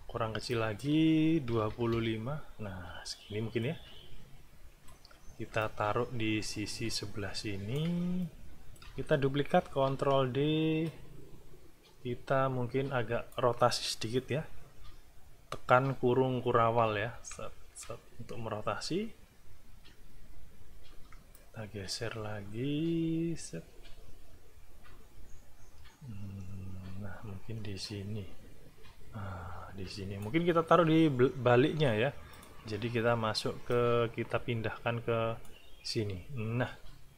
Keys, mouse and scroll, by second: 0.5 click, 1.5 KP_2, 1.7 KP_5, 1.9 KP_Enter, 3.6-5.1 drag, 5.6-7.9 alt+drag, 8.2 alt+click, 9.6 ctrl+d, 10.8-13.5 drag, 16.6 ], 21.3-30.4 alt+drag, 32.3 click, 33.7-35.6 drag.